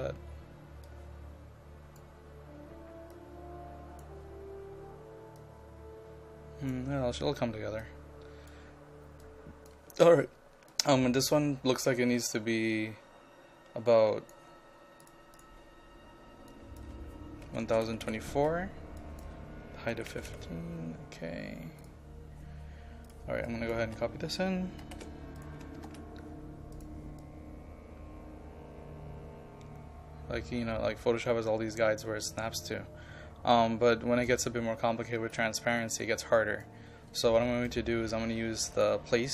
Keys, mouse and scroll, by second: 17.5 KP_1, 17.7 KP_0, 18.1 KP_4, 19.0 click, 20.0 KP_5, 20.1 KP_1, 20.3 KP_2, 21.8-22.9 drag, 23.9 a, 24.9 c, 25.4 click, 25.8 ctrl+v, 26.8-39.3 drag.